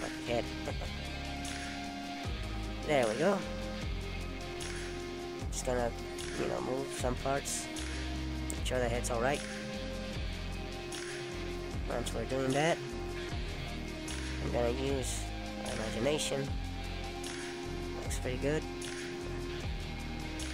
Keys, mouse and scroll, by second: 0.4 click, 1.6 middle click, 3.9 click, 5.2 click, 5.6 middle click, 6.2 scroll up 1, 7.1 click, 8.6 middle click, 10.8 middle click, 12.9 click, 14.0 shift+click, 16.0 click, 17.0 click, 18.9 middle click.